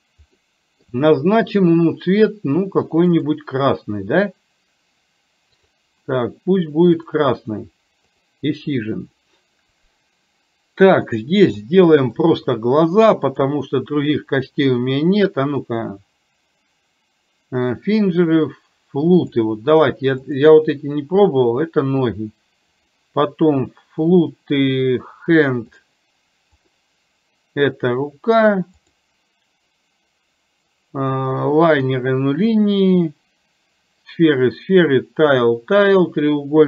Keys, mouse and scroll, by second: 0.4-0.8 scroll up 1, 0.8-1.6 scroll down 1, 1.6-3.2 scroll down 1, 3.2 click, 5.5-7.3 drag, 11.5-12.3 middle drag, 13.3-19.4 drag, 20.3 click, 22.8-36.6 drag.